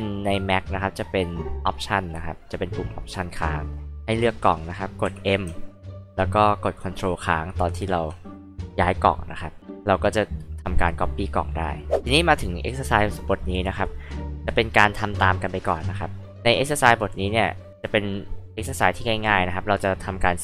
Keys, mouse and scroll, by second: 5.0 m, 12.3-12.8 drag.